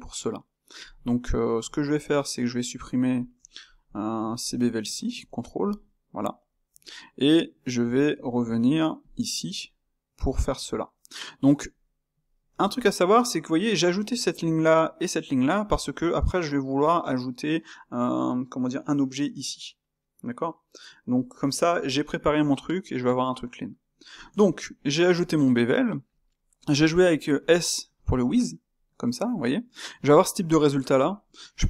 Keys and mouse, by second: 2.0 Tab, 2.9 Tab, 3.2 click, 5.6 space, 6.7 Tab, 8.1 Tab, 9.1 space, 12.1-15.9 middle drag, 24.2-27.4 ctrl+shift+middle drag.